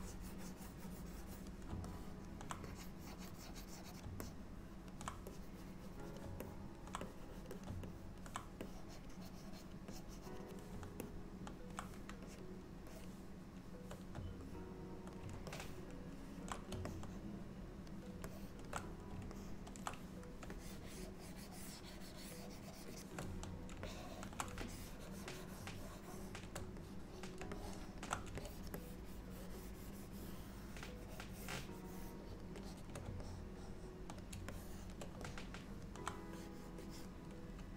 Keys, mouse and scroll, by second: 0.1 click, 0.1 middle click, 2.0 middle click, 2.7 click, 4.3 middle click, 5.4 click, 6.6 alt+middle click, 7.1 click, 7.6 click, 7.9 middle click, 8.7 click, 9.2 click, 10.0 click, 10.5 click, 11.1 middle click, 12.3-13.0 shift+click, 12.9 shift+click, 13.0 click, 13.5 shift+click, 14.6 middle click, 15.6 ctrl+middle click, 16.9 middle click, 18.3 shift+middle click, 19.4 ctrl+middle click, 20.6 shift+click, 22.4 shift+click, 22.9 shift+click, 24.0 shift+middle click, 24.7 shift+click, 26.9 middle click, 27.6 shift+middle click, 28.5 shift+click, 28.8 shift+click, 32.7 shift+click, 33.3 middle click, 34.6 shift+middle click, 35.3 middle click, 36.4 click, 36.9 click.